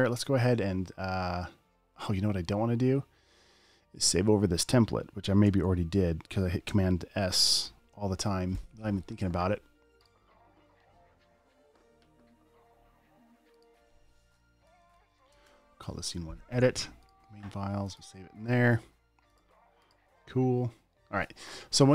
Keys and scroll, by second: 8.0 shift+super+s, 15.0-16.3 typing.